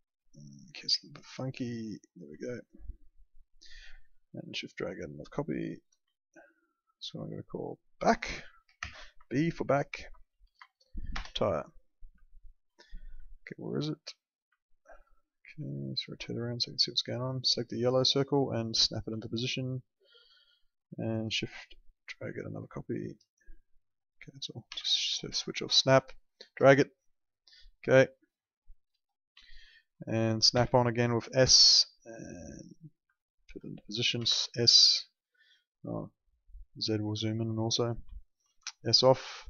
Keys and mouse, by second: 1.4 click, 2.4 alt+middle click, 3.8 alt+middle click, 4.7 shift+click, 6.2 alt+middle click, 6.9 click, 8.8 shift+b, 9.1 Right, 10.4 BackSpace, 11.1 Return, 12.3 alt+middle click, 13.3 alt+middle click, 14.6 alt+middle click, 15.6 alt+middle click, 18.2 click, 19.2 alt+middle click, 22.2 shift+click, 24.7 s, 25.9 shift+click, 28.1 alt+middle click, 29.4 alt+middle click, 31.5 click, 33.1 alt+middle click, 33.9-34.7 typing, 38.1 alt+middle click, 38.5 s.